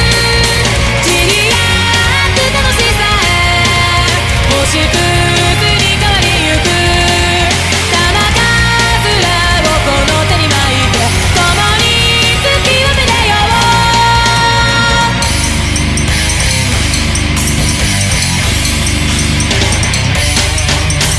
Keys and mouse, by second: 0.4 ctrl+z, 3.5 ctrl+z, 3.9 ctrl+z, 5.9 ctrl+z, 8.0 ctrl+z, 8.8 ctrl+z, 9.7 ctrl+z, 10.5 ctrl+z, 11.1 ctrl+z, 11.9 ctrl+z, 18.1 ctrl+z, 18.4 ctrl+z, 18.7 ctrl+z, 19.7 ctrl+z, 21.0 ctrl+z.